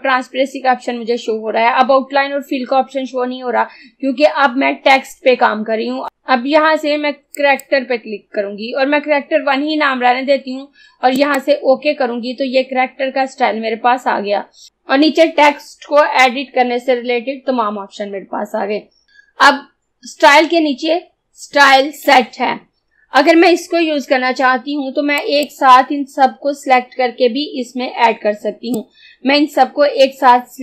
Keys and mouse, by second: 7.4 click, 11.3 click, 25.3 click, 28.9-30.6 drag.